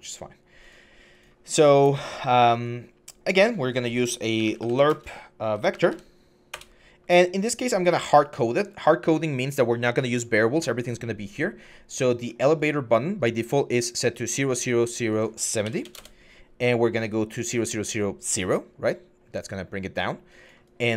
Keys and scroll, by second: 4.4-5.7 typing, 6.3 Return, 15.2-15.9 typing.